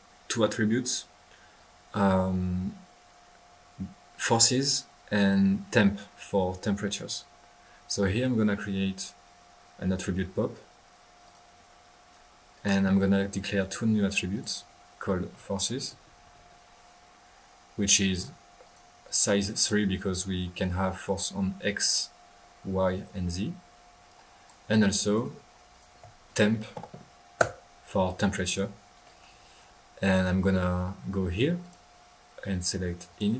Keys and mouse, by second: 0.9-1.3 middle drag, 1.5-4.4 drag, 7.9 right click, 11.2 click, 12.5 click, 14.3 click, 18.6 drag, 19.5 click, 20.0 click, 20.4-21.4 middle drag, 24.1-24.6 drag, 24.5-25.3 typing, 25.0 drag, 25.7 click, 27.0-27.7 typing, 28.4-28.8 drag, 29.0 middle click, 29.4-29.7 drag, 31.6 click, 33.1 click.